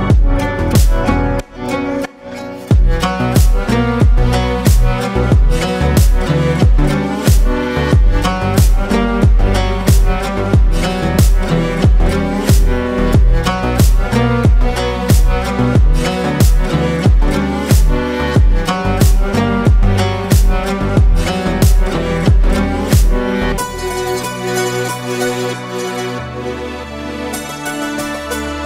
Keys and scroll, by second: 18.0 ctrl+space, 18.7 Delete, 20.4 space, 21.6 ctrl+space, 23.9 space.